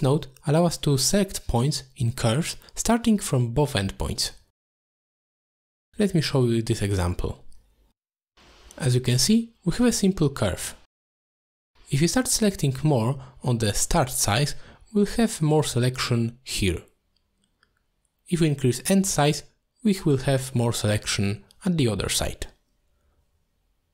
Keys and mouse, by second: 1.7 click, 3.2 middle click, 4.7-5.9 drag, 7.9 middle click, 8.8 middle drag, 9.4 click, 10.1 middle click, 10.5 shift+middle drag, 11.9 click, 12.1 click, 12.2 click, 12.4 click, 12.6 click, 12.7 click, 12.9 click, 13.2 click, 13.4 click, 14.2 click, 14.3 click, 14.5 click, 14.7 click, 14.8 click, 15.0 click, 15.1 click, 16.0 click, 16.2 click, 16.3 click, 16.5 click, 16.7 click, 16.9 click, 17.0 click, 17.2 click, 17.3 click, 18.4 click, 18.5 click, 19.0 click, 19.1 click, 19.3 click, 20.2 click, 20.3 click, 20.5 click, 20.7 click, 20.8 click, 21.0 click, 21.1 click, 22.0 click, 22.2 click, 22.5 click, 23.5-23.9 drag.